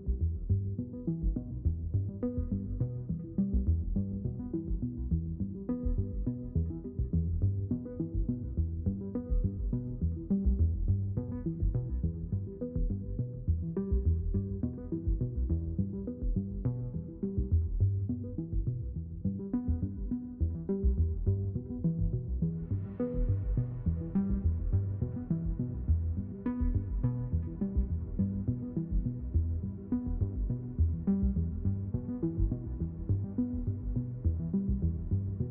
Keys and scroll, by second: 3.0 ctrl+z, 3.7 ctrl+z, 4.4 ctrl+z, 5.2 ctrl+z, 8.7 ctrl+z, 12.9 ctrl+z, 30.1 g, 30.9 s, 32.1-34.4 typing.